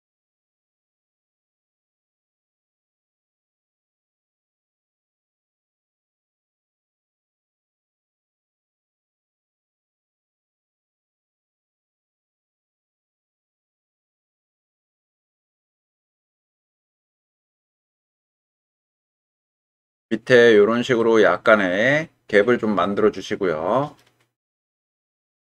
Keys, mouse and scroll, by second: 0.1 g, 0.2 x, 0.8 click, 1.7 g, 1.8 x, 2.5 click, 3.1 click, 3.5 g, 3.5 x, 5.2 click, 6.3 g, 6.4 x, 7.3 click, 7.7 g, 7.9 y, 9.5 click, 9.9 click, 10.7 middle click, 11.8 shift+middle click, 13.3 g, 14.2 click, 14.9 click, 15.3 g, 16.4 click, 17.5-20.1 middle drag, 21.1-24.0 middle drag.